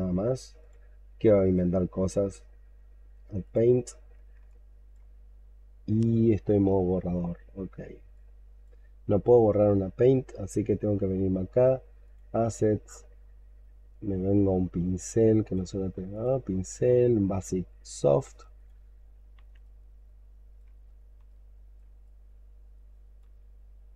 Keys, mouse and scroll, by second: 1.3 right click, 4.3 alt+click, 12.7-14.3 scroll up 11, 19.5 ctrl+right click, 21.1 ctrl+right click.